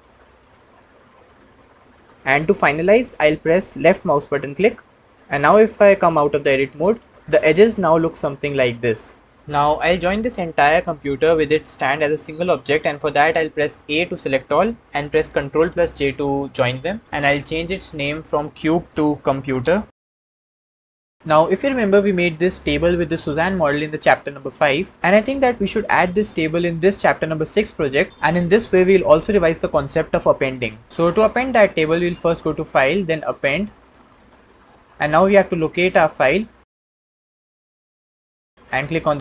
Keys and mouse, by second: 6.7 Tab, 13.7 a, 15.3 ctrl+j, 17.6 click, 17.8-21.1 drag, 32.0-34.2 drag.